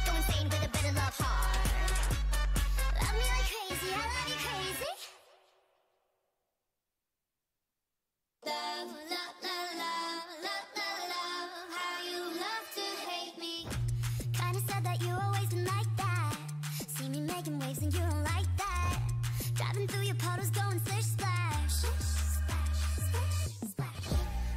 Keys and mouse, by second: 0.4 a, 1.8 ctrl+r, 2.1 a, 3.8 ctrl+r, 4.9 click, 4.9 a, 5.9 ctrl+r, 6.3 click, 6.3 right click, 6.5 k, 9.8 a, 13.1 click, 13.6-15.4 middle drag, 15.4 e, 17.0 ctrl+z, 17.2 ctrl+z, 17.6 a, 18.0 click, 18.6 e, 19.8 click, 22.0 e, 23.9 e.